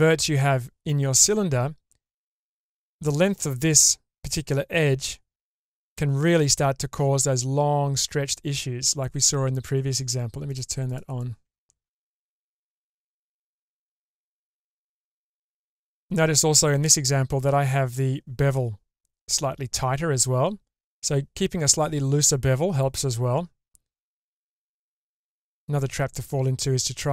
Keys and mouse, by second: 10.5 click, 10.9 click, 11.5 Tab, 12.3 click, 13.1 shift+space, 14.1 Tab, 15.0 click, 24.7 Tab, 26.3 Tab.